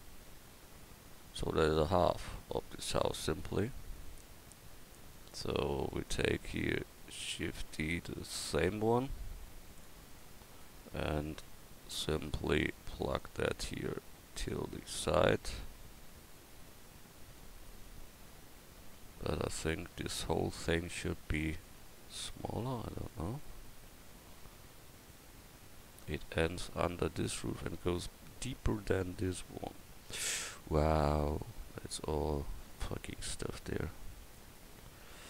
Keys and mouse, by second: 7.6 shift+d, 11.9 Tab, 13.2-15.3 drag, 35.1 Tab.